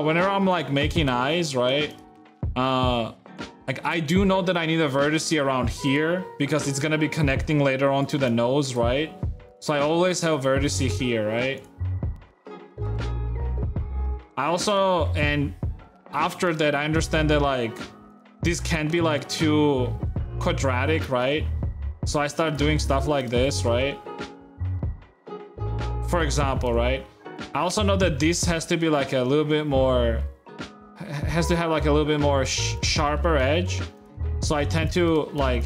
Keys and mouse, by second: 0.4 shift+middle click, 1.0 shift+click, 1.7 click, 2.0 shift+click, 3.1 g, 3.8 shift+click, 4.0 middle click, 5.3 e, 6.6-8.7 d, 7.6 click, 8.0 click, 9.1 d, 9.6 g, 10.5 Tab, 11.4 click, 12.1-13.1 drag, 13.5 Tab, 14.5 middle click, 16.6 g, 18.8 g, 20.7 e, 22.6 r, 23.6 e, 25.1 e, 26.6 shift+e, 32.4 shift+g, 33.0 e, 34.3 e, 35.3 g.